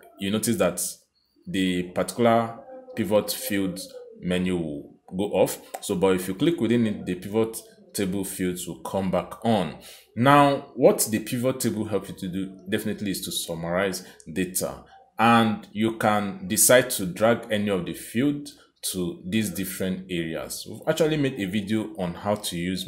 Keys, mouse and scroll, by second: 5.1 click.